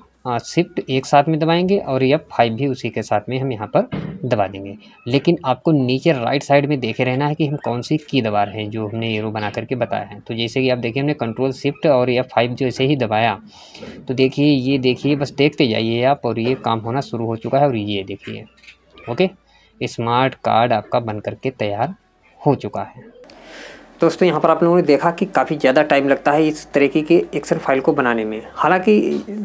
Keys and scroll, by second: 10.9 ctrl+shift+F5.